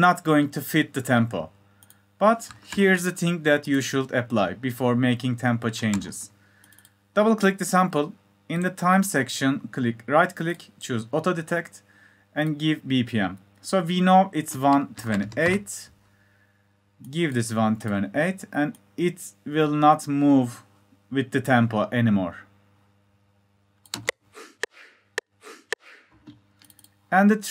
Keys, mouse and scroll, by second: 27.3 click.